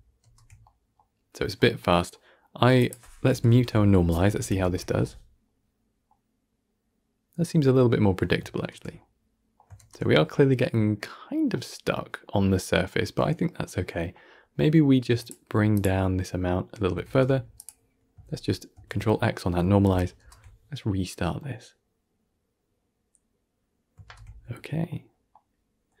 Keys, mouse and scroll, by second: 0.1 shift+space, 0.5-1.5 middle drag, 1.5 scroll down 3, 1.7-2.7 middle drag, 2.7 click, 3.2 m, 3.6 middle click, 4.3 shift+Left, 4.5 shift+space, 5.3-8.5 middle drag, 8.5 shift+space, 8.9-9.6 middle drag, 9.6 shift+space, 10.7-14.3 middle drag, 14.3-15.2 scroll up 5, 15.2-17.0 drag, 17.0 shift+space, 17.4 click, 18.6 ctrl+x, 19.7 shift+Left, 20.0 shift+space, 20.8-23.8 middle drag, 23.9 shift+space, 24.2-24.9 middle drag, 24.9 scroll up 1, 25.2-26.0 middle drag.